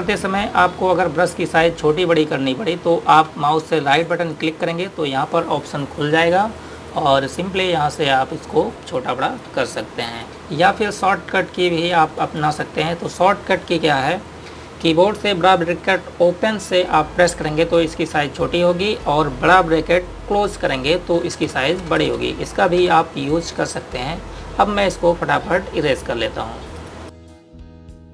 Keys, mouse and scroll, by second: 4.8 right click, 7.6 click, 18.0-18.9 typing, 21.2-24.5 typing, 26.0 click.